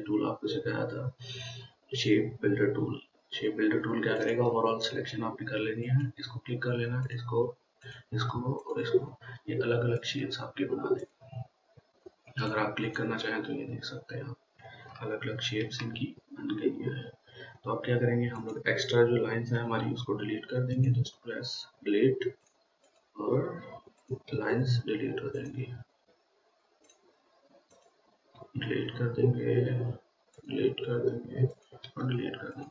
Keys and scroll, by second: 15.9 ctrl+z, 20.1 Delete, 21.8 Delete, 23.7 Delete, 24.7 Delete, 28.9 Delete, 31.0 Delete, 32.3 Delete.